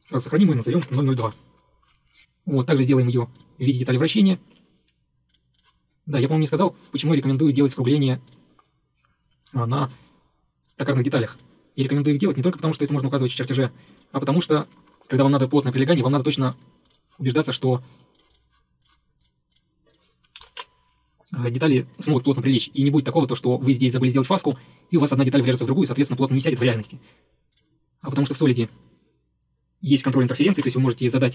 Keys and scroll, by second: 0.6-1.5 typing, 9.3 Escape.